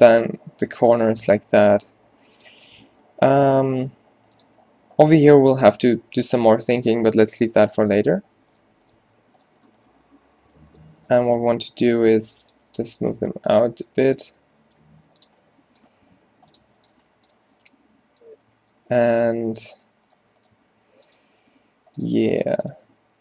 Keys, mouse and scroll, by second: 0.5 middle click, 1.3 k, 3.5 a, 3.9 click, 4.0 g, 7.1 click, 7.1 g, 12.1 g, 13.7 g, 14.9 g, 16.1 g, 19.4 g, 20.7 click, 20.7 g, 21.8-23.2 typing, 22.5 click.